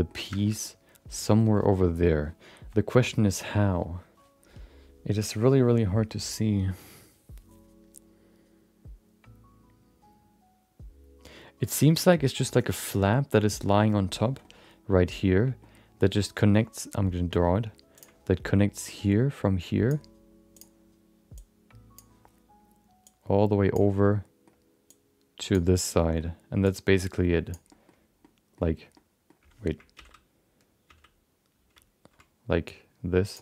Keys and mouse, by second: 0.3 shift+middle click, 0.6 middle click, 14.4 middle click, 15.6 middle click, 17.9 click, 18.8-20.2 drag, 23.0-24.0 drag, 24.0 middle click, 24.9 click, 25.8 middle click, 26.6-27.8 drag, 27.8 middle click, 28.2 middle click, 28.9 middle click, 31.6 ctrl+z.